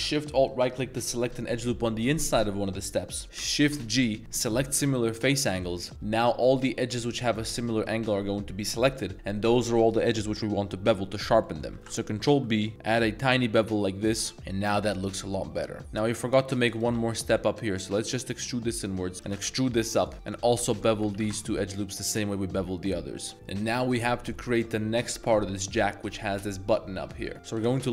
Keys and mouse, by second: 0.5 alt+shift+click, 3.4 shift+g, 7.3 middle drag, 9.0 middle click, 11.5 middle click, 11.8 ctrl+z, 11.8 ctrl+b, 14.3 Tab, 14.3-15.6 middle drag, 15.8 shift+s, 16.9 s, 18.7 click, 19.3 g, 19.5 z, 20.1 alt+2, 20.7 alt+shift+click, 21.1 ctrl+b, 24.7 middle click, 27.3 middle click, 27.3 Tab, 27.5 g, 27.8 z.